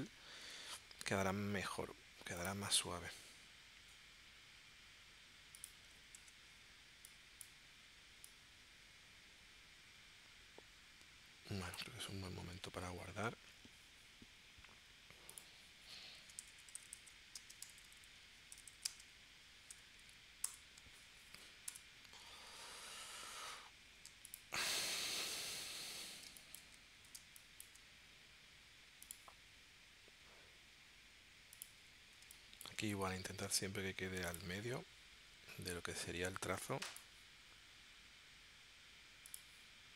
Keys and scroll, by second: 0.4 p, 6.1 shift+c, 12.9 shift+super+s, 16.0-17.6 typing, 18.7-19.7 typing, 20.4 Return, 21.7 Return, 25.7 p, 26.2 space, 27.1 space, 32.2 space.